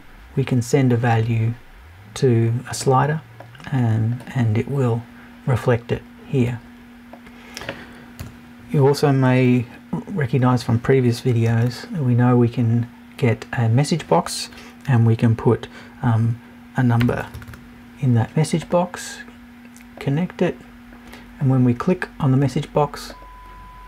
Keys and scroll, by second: 8.2 BackSpace.